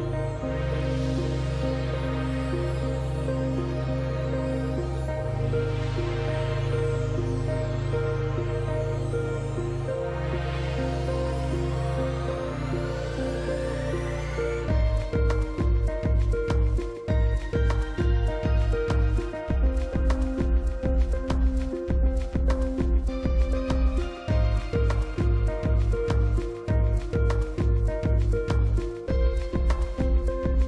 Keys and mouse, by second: 0.7 drag, 1.1-1.8 shift+middle drag, 2.0 click, 2.9 g, 3.1 x, 4.0 click, 4.4 g, 4.7 y, 5.5 drag, 6.6-7.2 middle drag, 7.5 g, 7.8 z, 10.8 shift+click, 11.7-13.1 middle drag, 13.3 drag, 14.0 g, 14.3 x, 14.8 drag, 16.0-16.4 shift+drag, 16.7 click, 17.7 r, 18.0 z, 18.8 KP_9, 19.0 KP_0, 19.5 click, 20.4 g, 20.9 shift+z, 21.7 click, 22.3 KP_0, 23.7 g, 24.1 y, 27.7 shift+drag, 28.8 click.